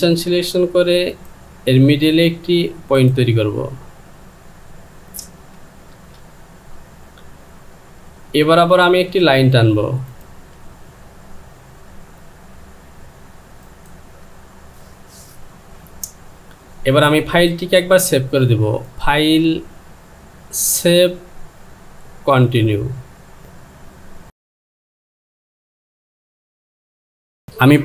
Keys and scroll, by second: 5.4 KP_2.